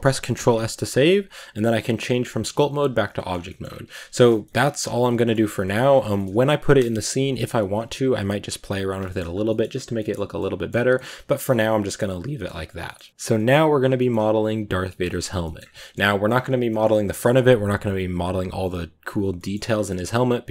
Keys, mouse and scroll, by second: 2.8 drag, 3.0 middle click, 3.2 scroll down 1, 3.3 middle drag, 3.5-3.8 scroll up 1, 3.8 Tab, 4.0 shift+middle click, 4.4 scroll up 3, 4.7 scroll down 3, 4.8 Tab, 4.9 middle click, 5.2-5.5 scroll up 2, 5.5 middle drag, 5.7-6.0 scroll down 3, 6.0-7.2 shift+middle drag, 7.2-8.8 scroll up 2, 8.8 scroll up 3, 8.9 middle drag, 9.2-9.8 scroll down 3, 9.3 middle click, 9.8 middle click, 10.0 scroll up 2, 10.2-10.5 middle drag, 10.5 scroll down 2, 10.8-11.3 middle drag, 11.3 scroll up 1, 11.5-11.9 scroll down 6, 11.9 middle click, 12.3-12.7 scroll up 5, 12.7 middle click, 12.9 scroll down 1, 13.1-13.8 scroll up 2, 13.2-13.5 middle drag, 13.8-16.2 middle drag, 16.2-16.5 scroll up 2, 16.5-19.6 middle drag, 19.6 scroll down 1, 19.7-20.1 middle drag, 20.1 scroll up 1, 20.3-20.5 middle drag.